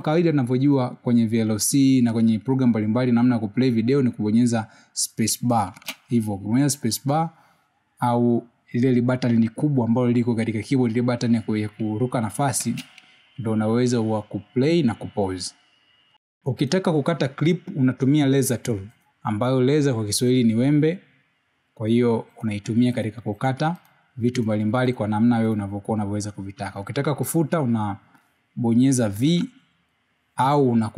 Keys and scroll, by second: 9.0 space, 15.5 space.